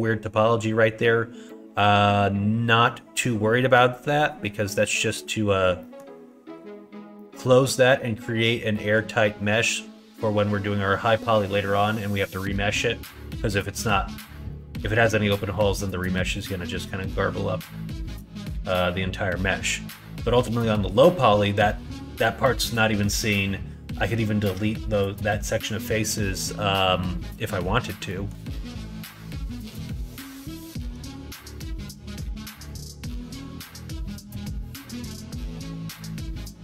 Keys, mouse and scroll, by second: 1.5 middle click, 5.8 middle click, 7.1 middle click, 8.7 middle click, 28.1 middle click, 29.6 ctrl+e, 31.3 ctrl+4, 33.1 middle click, 33.8 ctrl+r, 35.1 middle click, 36.0 click, 36.2-36.6 middle drag.